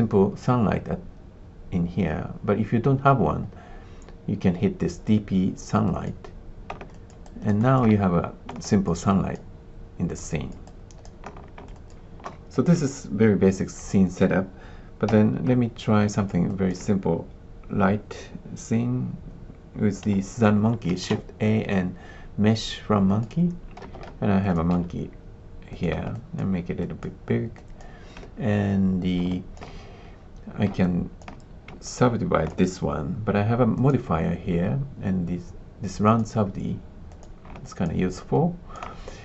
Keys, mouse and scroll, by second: 5.9 click, 6.8 alt+click, 7.2 alt+click, 7.6 alt+click, 8.6 alt+click, 9.0 alt+click, 10.2 alt+click, 10.6 alt+click, 11.7 alt+click, 12.5-15.0 drag, 15.0 x, 16.0 alt+click, 16.4 alt+click, 20.8 shift+a, 23.8 space, 23.9 d, 24.4 click, 24.7 s, 26.1 alt+click, 26.8 alt+click, 27.5 alt+click, 29.3 alt+click, 30.8 alt+click, 31.8 alt+click, 33.8 click, 36.0 click, 37.0 click, 37.6 alt+click, 38.1 alt+click.